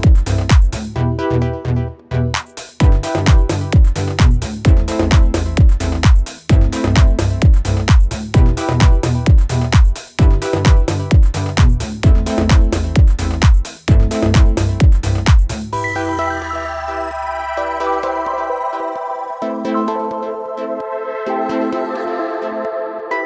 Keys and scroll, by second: 0.1 ctrl+z, 0.3 ctrl+z, 8.5 Escape, 11.8 ctrl+z.